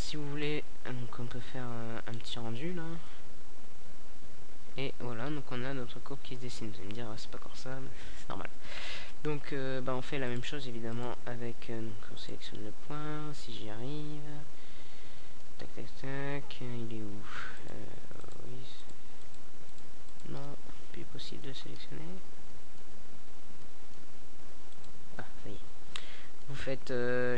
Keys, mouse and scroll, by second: 0.0 Escape, 1.0-5.4 right drag, 5.4 KP_Decimal, 6.3-8.8 middle drag, 9.2-11.1 right drag, 16.3-18.4 middle drag, 19.2 shift+d, 19.7 click, 20.7 g, 21.0-21.3 right drag, 22.8-24.7 drag, 24.1-27.3 right drag.